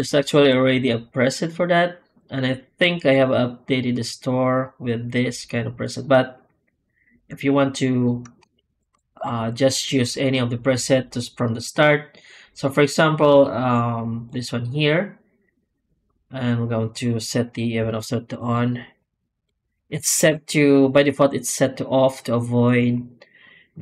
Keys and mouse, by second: 20.1 F9.